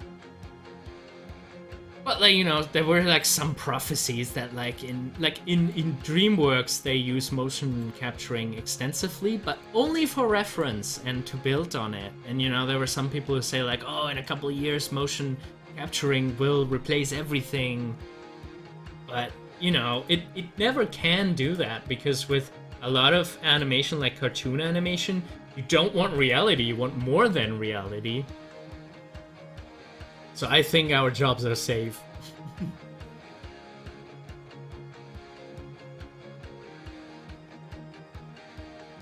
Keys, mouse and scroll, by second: 0.0 click, 2.2 scroll up 1, 5.7-10.5 drag, 14.1-17.7 middle drag, 17.7 scroll up 1, 26.1 click, 28.3 scroll up 1, 29.9 click, 32.9 scroll down 1, 33.6 middle click, 34.4 scroll up 1.